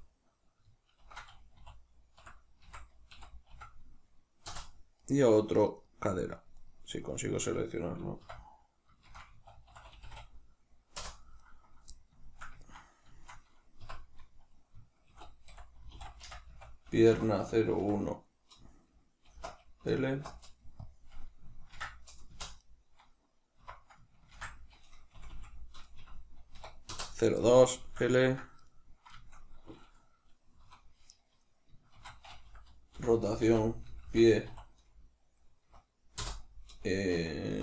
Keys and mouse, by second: 4.9 right click, 5.1 right click, 5.5 right click, 5.7 right click, 6.0 right click, 6.1 right click, 6.3 right click, 6.5 right click, 6.8 right click, 7.0 right click, 7.3 right click, 8.1 F2, 11.3 right click, 12.2-22.5 shift+middle drag, 13.7 F2, 22.5 right click, 23.5 F2, 25.2 Left, 26.9 Return, 27.3-28.6 middle drag, 28.6 right click, 29.1-37.6 shift+middle drag, 30.5 F2.